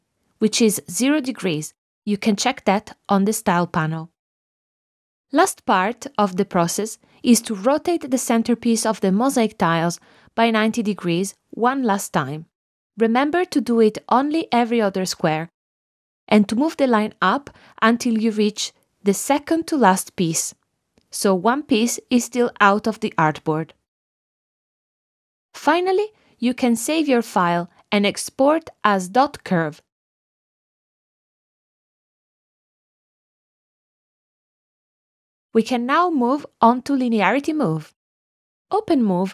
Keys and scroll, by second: 32.3-34.9 typing, 35.5 Return.